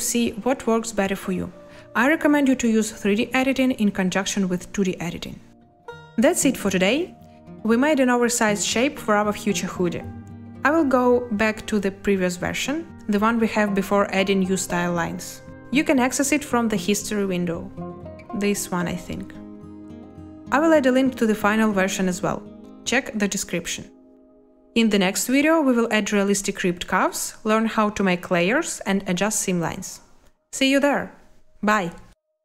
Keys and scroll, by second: 2.1 shift+z, 6.7 a.